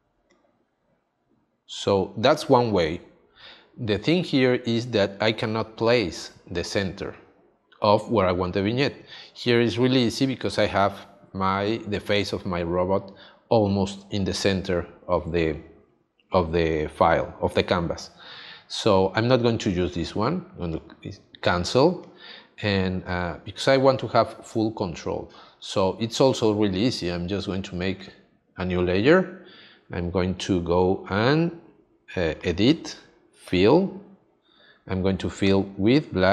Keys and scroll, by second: 15.1 space, 22.6 space.